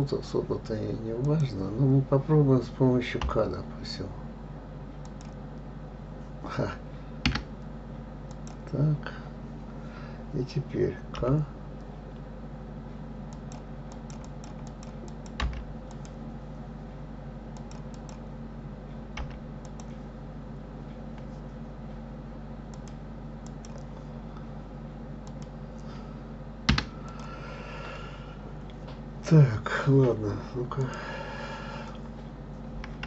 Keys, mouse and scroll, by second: 1.2 click, 3.2 k, 8.3 click, 11.1 k, 27.1 click, 27.5-29.3 scroll down 4, 29.3-30.8 scroll down 1, 30.8 click, 32.2-32.5 scroll up 2.